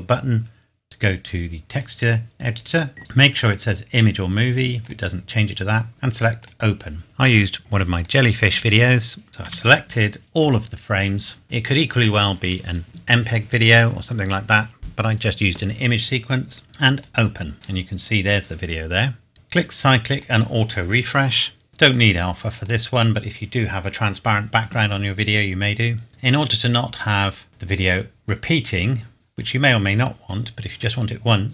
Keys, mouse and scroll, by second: 1.7 click, 4.3 click, 9.4 a, 16.9 click, 19.3 scroll down 1, 19.5 click, 21.7 scroll down 1, 21.9 click, 26.1 scroll up 1, 27.4-28.4 scroll down 1, 30.3-30.9 scroll down 1.